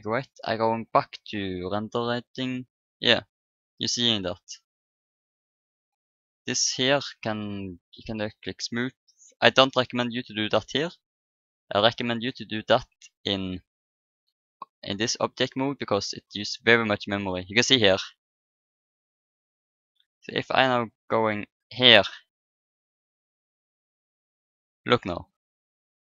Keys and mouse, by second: 2.6-4.6 middle drag, 4.9-6.7 middle drag, 6.7-7.8 right drag, 8.6-11.0 drag, 10.4 right click, 11.5-15.8 drag, 20.8 click, 21.5-22.7 drag, 25.7-26.0 drag.